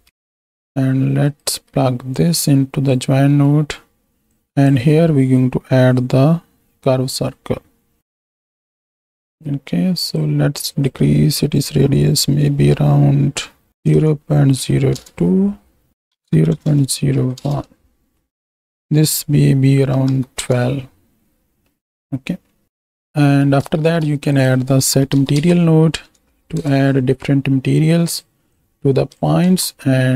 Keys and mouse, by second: 1.3 ctrl+click, 2.2-3.1 drag, 3.4 middle click, 4.2-8.6 drag, 10.0 click, 10.7-14.9 drag, 13.9 KP_0, 15.9-17.6 drag, 16.6 KP_0, 18.6 alt+a, 18.8-20.4 drag, 21.7 middle click, 22.6 right click, 23.2 click, 23.2 right drag, 23.8 shift+a, 28.5-29.6 drag, 29.5 shift+d.